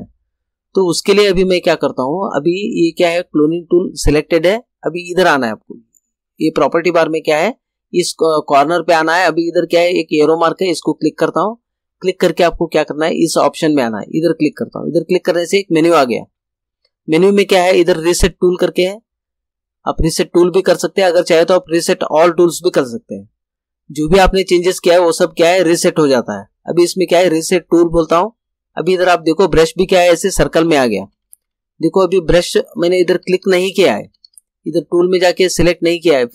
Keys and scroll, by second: 30.7 ], 33.1 ].